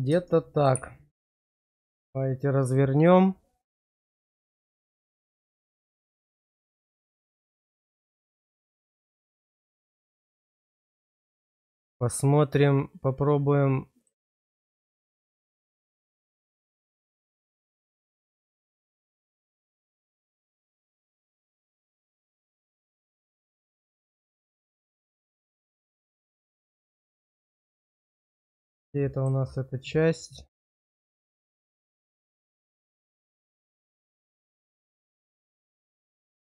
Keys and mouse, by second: 1.8-2.8 drag, 5.6 middle click, 8.3-11.4 drag, 17.7 click, 18.8 shift+click, 19.7-21.0 drag, 27.5 click, 28.2 click.